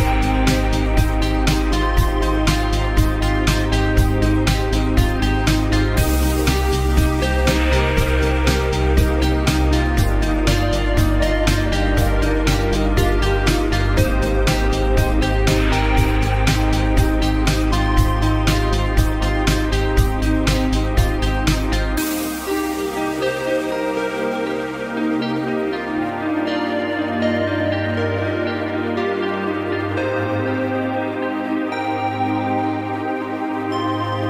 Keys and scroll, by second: 17.1 2, 17.5 0.